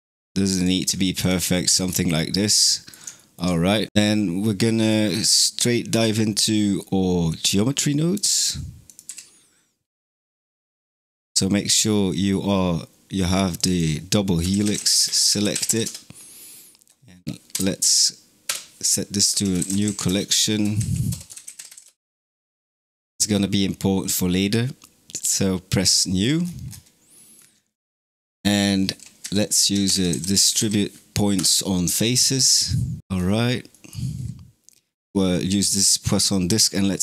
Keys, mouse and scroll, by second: 1.1 click, 1.7-2.4 scroll down 5, 2.4-3.9 middle drag, 7.1-11.0 drag, 13.4 click, 13.5-17.4 drag, 17.4 m, 21.9 Return, 25.0 click, 25.8 middle click, 26.3-26.7 scroll up 11, 27.0-27.6 middle drag, 27.6 click, 28.0 shift+a, 33.0-33.5 scroll up 8, 33.5 middle click, 34.0-35.0 scroll up 3, 35.0-37.0 drag.